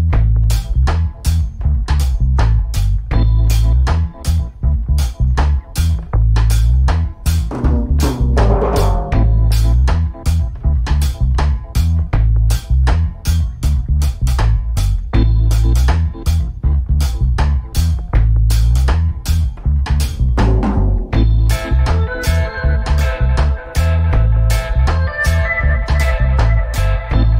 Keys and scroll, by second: 1.0 g, 10.2 shift+Left, 11.0 alt+a.